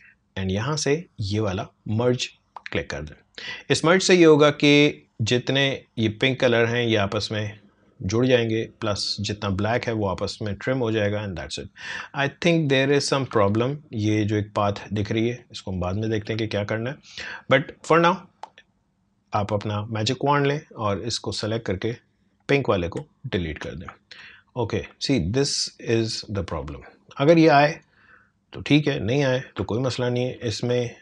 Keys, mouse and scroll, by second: 5.5 click, 11.9 click, 12.1 alt+scroll up 1, 12.6 alt+scroll down 1, 13.4 alt+scroll up 1, 14.3 alt+scroll down 1, 17.9 click, 20.8 click, 22.8 Delete, 24.2 alt+scroll up 1, 26.1-29.7 drag, 29.7 alt+scroll up 1, 30.7 space, 30.9 click.